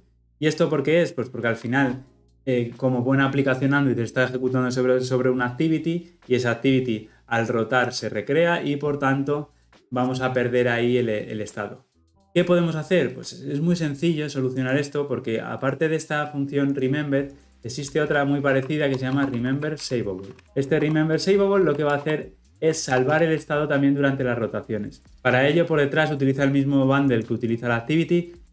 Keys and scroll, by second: 20.7 Escape, 22.8 ctrl+alt+l, 23.0 ctrl+alt+o.